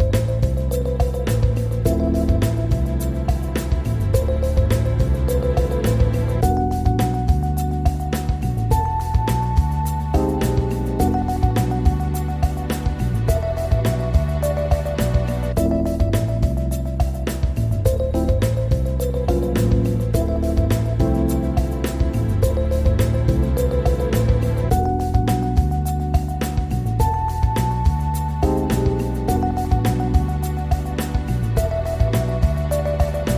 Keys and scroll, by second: 23.9 ctrl+r, 30.7 ctrl+g.